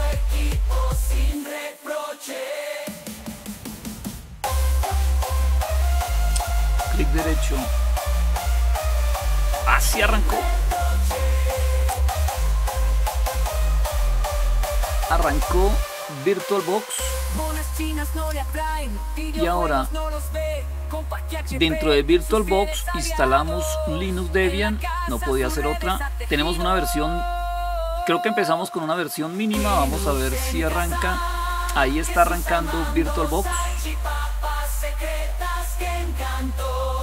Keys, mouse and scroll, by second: 28.4-29.5 drag.